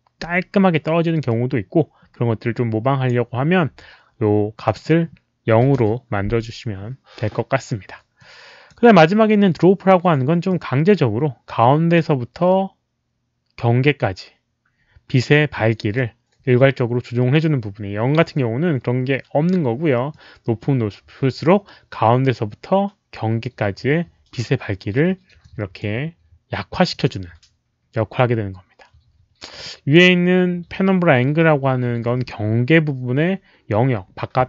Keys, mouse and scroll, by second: 1.2-3.0 drag, 4.5 click, 4.7 click, 5.6 KP_0, 5.7 Return, 8.1 click, 10.4-11.9 drag, 11.9 Return, 11.9 KP_0, 15.9-18.1 drag, 20.0-20.5 drag, 25.3-25.7 drag, 26.8 click, 29.6-29.9 drag.